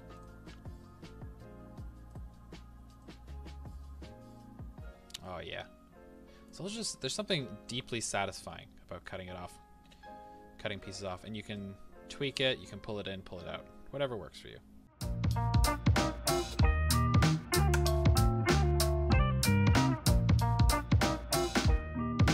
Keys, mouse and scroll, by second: 3.0-7.1 drag, 7.1-9.9 middle drag, 9.9 KP_1, 11.5-14.8 drag, 14.8-16.5 middle drag, 15.1 KP_3, 16.5 a, 17.0 click, 17.5-18.6 shift+middle drag, 17.7 a, 18.6 click, 19.2 a, 19.5-20.5 middle drag, 19.7 Tab, 20.2 Tab, 20.5-21.8 drag, 21.8-22.3 middle drag.